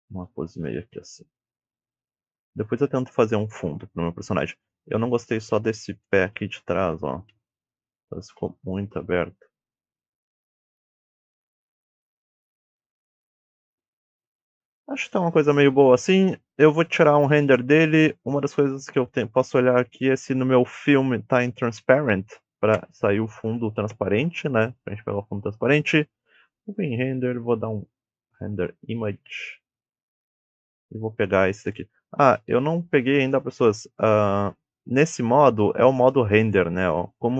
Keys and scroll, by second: 0.2 e, 0.6 s, 5.9 ctrl+Tab, 7.2 KP_7, 8.2 r, 8.8 z, 10.1-11.3 typing, 12.8 KP_1, 12.8 x.